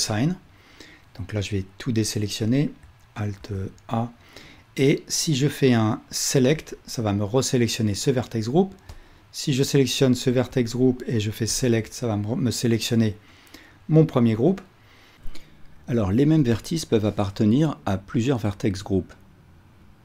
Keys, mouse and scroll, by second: 3.5 alt+a, 10.5 alt+a, 11.6-20.0 drag.